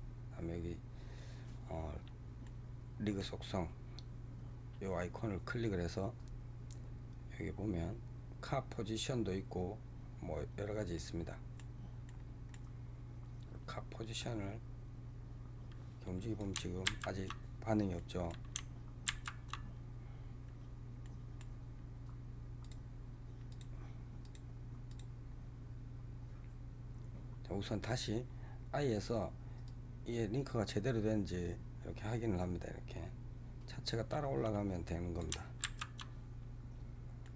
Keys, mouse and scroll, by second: 2.3-5.3 middle drag, 10.8-13.5 middle drag, 13.5-16.6 drag, 17.8 ctrl+z, 17.9-20.1 middle drag, 20.1 ctrl+z, 20.9-22.5 middle drag, 22.5 click, 23.4 click, 24.1 click, 24.8 click, 29.5-32.5 drag, 36.7 ctrl+z, 37.1-37.3 middle drag.